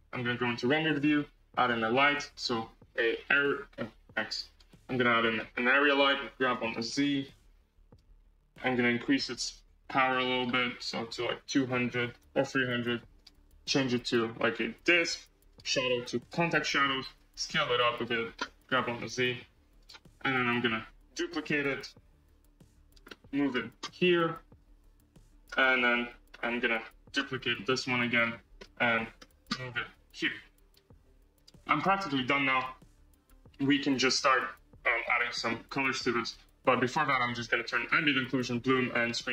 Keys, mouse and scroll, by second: 4.5 x, 5.8 shift+a, 6.4 g, 13.1 0, 14.8-16.2 drag, 17.1 s, 18.5 g, 20.1-21.3 scroll, 21.3 shift+d, 23.0-24.1 middle drag, 24.1 r, 25.5-27.3 middle drag, 27.3 shift+d, 28.5-29.5 middle drag, 29.5 r, 31.5-32.5 middle drag, 32.5 KP_0, 33.1 scroll, 37.9 click, 38.3 click, 39.2 click.